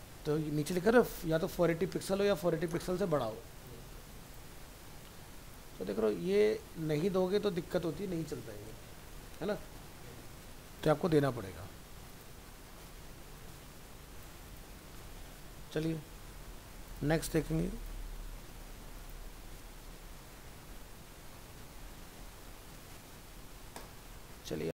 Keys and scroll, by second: 15.0 ctrl+w, 23.2 ctrl+s.